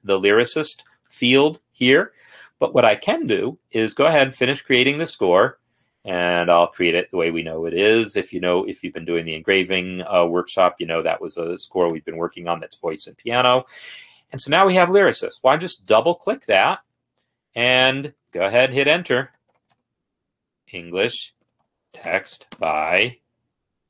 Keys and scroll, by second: 17.4 End, 18.4 Return, 19.4-22.7 typing.